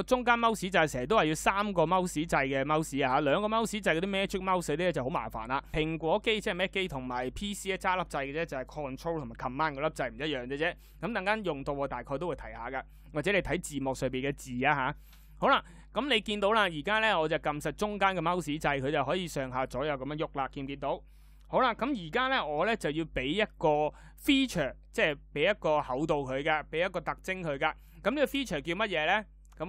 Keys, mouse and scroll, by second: 0.2-2.4 middle drag, 15.6-20.6 middle drag.